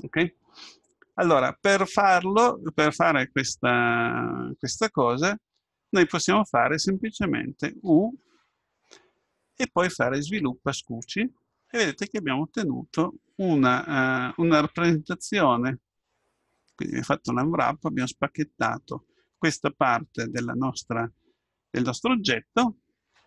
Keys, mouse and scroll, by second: 7.9 u, 12.4-15.9 middle drag.